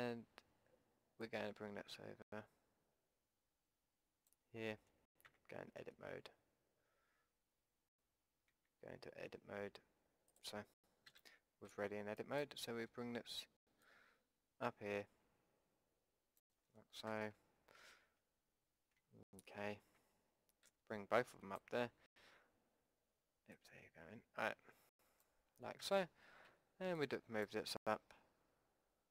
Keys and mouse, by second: 1.2-3.2 drag, 5.2 Tab, 8.4 Tab, 10.3-12.4 drag, 11.0 a, 11.7 b, 13.8-15.8 drag, 17.1 KP_1, 17.7 KP_3, 19.5 ctrl+z, 20.7 b, 23.6-25.6 drag, 25.8 a, 26.5 b.